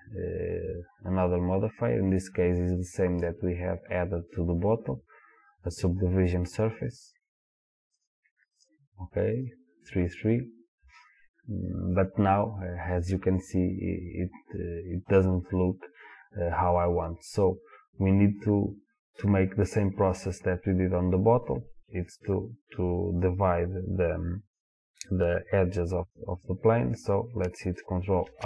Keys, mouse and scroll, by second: 9.4 click, 28.3 ctrl+r.